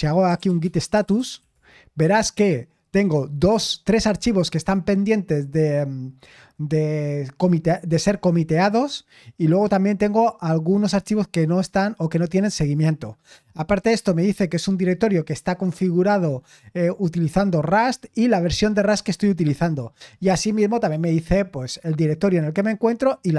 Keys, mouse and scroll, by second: 0.0-1.9 typing.